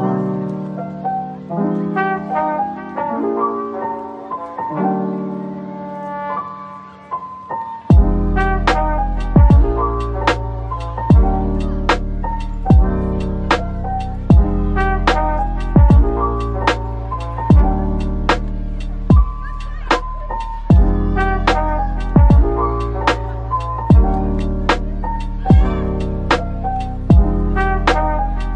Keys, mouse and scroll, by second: 1.1-2.3 scroll down 1, 2.3 typing, 9.2 Tab, 13.0-13.3 typing, 15.7-16.2 typing, 17.4 right click, 18.3-18.6 typing, 23.1 Tab, 23.7-24.5 scroll down 1, 24.3-25.4 typing, 25.8 scroll down 1, 27.0 typing.